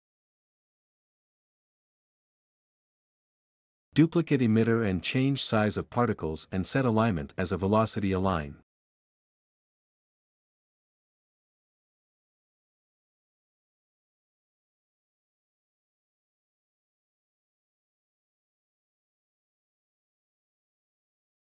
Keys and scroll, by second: 4.3 ctrl+c, 4.5 ctrl+v, 9.3 1, 10.2 2, 11.9-16.6 typing.